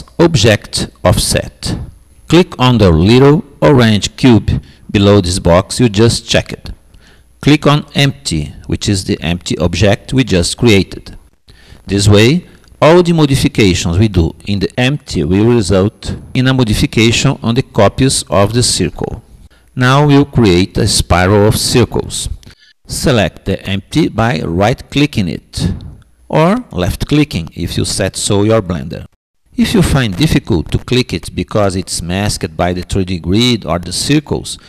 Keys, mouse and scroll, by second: 2.0-3.5 drag, 4.5-5.6 drag, 24.1-25.9 drag.